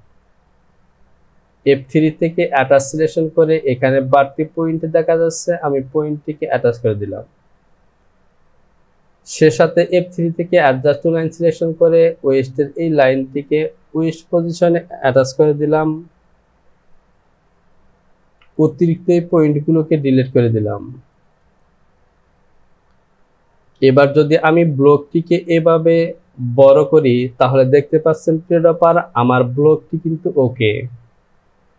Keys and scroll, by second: 15.6 Home, 18.4 Delete.